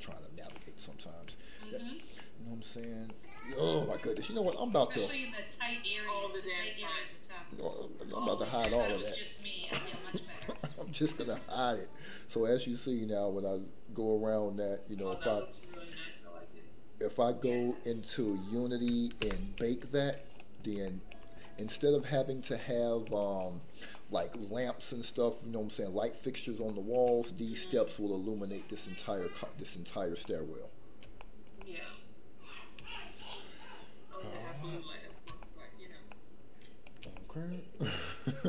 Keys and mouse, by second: 0.1 shift+middle click, 0.5 middle click, 1.6 shift+middle click, 2.2 middle click, 3.1 shift+middle click, 3.6 middle click, 6.0 click, 9.2 h, 9.6-10.1 middle drag, 10.5-10.8 shift+middle drag, 11.0-14.9 middle drag, 15.2 shift+middle click, 15.7-17.5 middle drag, 19.2 ctrl+z, 20.9 shift+middle click, 21.6 middle click, 22.6-23.0 shift+middle drag, 23.9-24.2 middle drag, 24.3-24.6 shift+middle drag, 26.6-27.0 shift+middle drag, 27.2-27.5 middle drag, 30.2-31.0 middle drag, 31.2 shift+middle drag, 31.6-32.3 middle drag, 32.9-33.2 shift+middle drag, 33.3-34.2 middle drag, 35.4-35.9 shift+middle drag, 36.1-36.7 middle drag, 37.1-37.7 shift+middle drag, 37.8-38.2 middle drag.